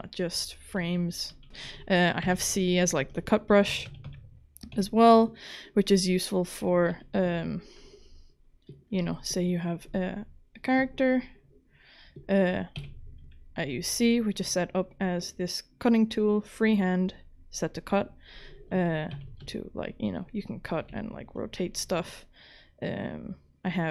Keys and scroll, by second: 0.0-2.2 typing, 3.5-4.7 typing, 6.9 w, 9.0 ctrl+z, 12.8 c, 19.1 c, 20.9 g.